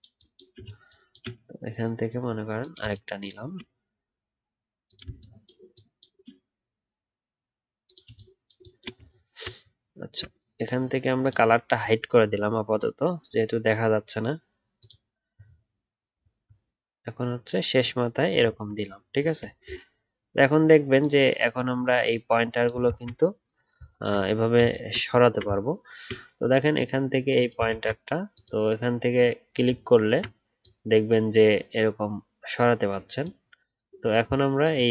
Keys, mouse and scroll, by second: 9.0 alt+scroll up 1, 9.1 alt+scroll down 5, 12.2 alt+scroll down 1, 12.4 alt+scroll up 1, 15.3 alt+scroll down 1, 16.0 alt+scroll down 1, 16.1 alt+scroll up 1, 18.3 alt+scroll down 1, 19.0 alt+scroll up 2, 23.9 alt+scroll up 1, 25.2-27.6 alt+scroll down 1, 27.6-33.0 alt+scroll.